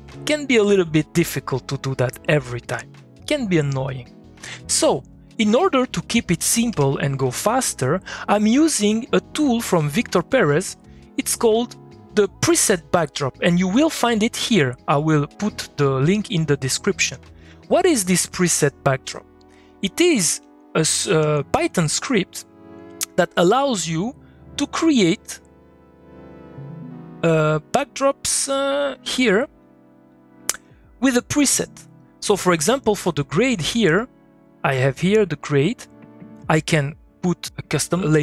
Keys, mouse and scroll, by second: 5.2-7.1 drag, 9.4-16.6 drag, 17.4 click, 19.3 click, 19.4 middle click, 19.7 click, 20.4 g, 21.2 g, 21.5 g, 22.4-25.0 drag, 28.9 click.